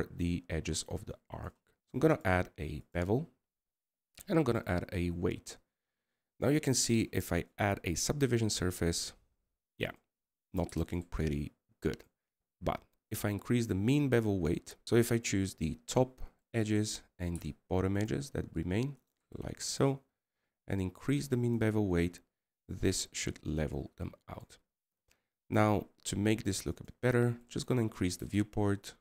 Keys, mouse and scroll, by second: 1.8-2.5 scroll up 3, 2.5 scroll down 3, 2.6-12.6 scroll up 1, 12.6 middle click, 14.8 right click.